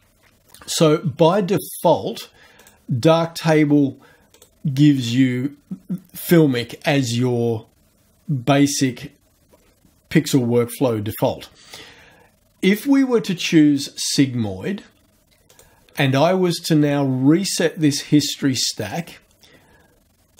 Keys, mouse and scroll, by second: 0.3 scroll up 1, 1.1-2.6 scroll down 1, 2.6 click, 4.4 click, 12.8 click, 13.3 click, 15.5 click, 18.9 click.